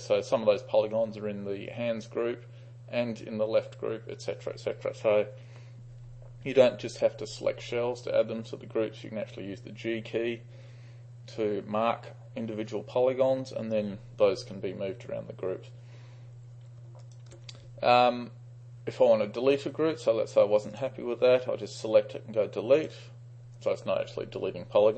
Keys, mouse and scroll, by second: 17.1 ctrl+click, 17.3-18.8 ctrl+drag, 20.8-21.9 drag, 22.8 click.